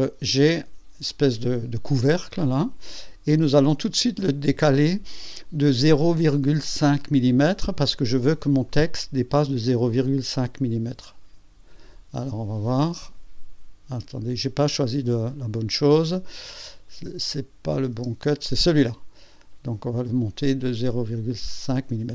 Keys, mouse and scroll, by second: 1.0 click, 2.0-3.3 drag, 3.5 scroll up 2, 7.0 click, 8.6 click, 9.9 click, 12.2 scroll down 1, 13.0-13.7 scroll up 2, 13.9 scroll down 2, 17.4 click, 17.9 space, 20.6 click, 21.4 scroll up 1.